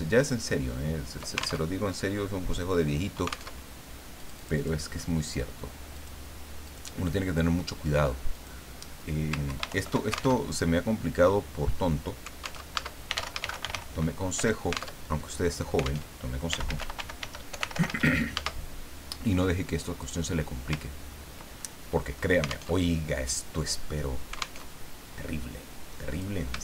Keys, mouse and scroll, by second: 1.7 ctrl+alt+Tab, 3.5 alt+Tab, 4.2 click, 5.9 click, 6.6 click, 8.3 click, 9.5 ctrl+Home, 9.7 ctrl+shift+End, 10.4 ctrl+alt+shift+Tab, 12.6 alt+Tab, 13.1 alt+r, 13.3 alt+a, 13.4 alt+d, 13.5 alt+i, 13.6 alt+n, 13.7 alt+g, 14.3 Return, 15.0 alt+Tab, 16.1 alt+Tab, 16.3-18.5 typing, 20.0 click, 20.9 ctrl+scroll down 2, 21.6 ctrl+middle click, 22.7 alt+Tab, 24.6 alt+Tab, 26.1 click.